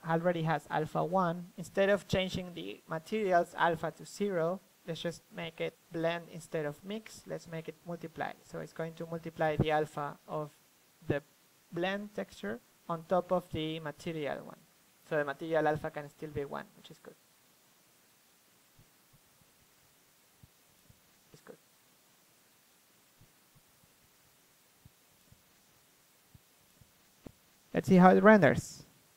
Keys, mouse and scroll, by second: 0.8-2.5 drag, 3.7-8.5 drag, 12.5-17.8 drag, 18.0-29.0 drag.